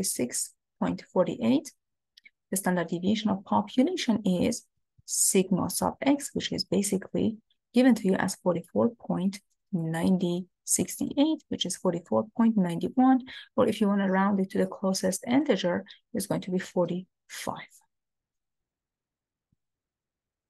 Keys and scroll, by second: 5.0 Up, 5.8 Up.